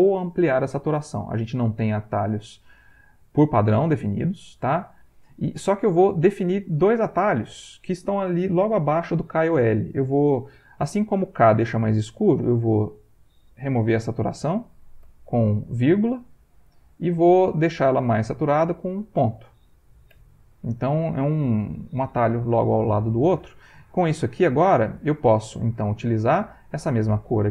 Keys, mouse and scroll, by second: 2.5 click, 3.8 click, 6.3 click, 12.6 click, 15.0 ,, 18.3 click, 19.2 click, 20.1 ., 23.5 click, 26.7 ctrl+click.